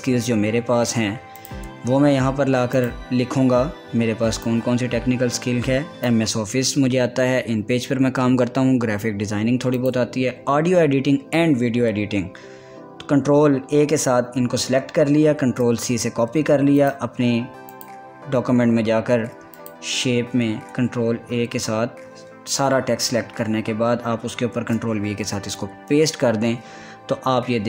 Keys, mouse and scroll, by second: 0.3 ctrl+a, 2.0 click, 2.8 scroll down 1, 3.4-8.9 drag, 10.4 click, 12.6 ctrl+a, 16.1 ctrl+c, 17.4 click, 18.7 click, 20.2 click, 21.3 ctrl+a, 24.7 ctrl+a, 25.2 ctrl+v.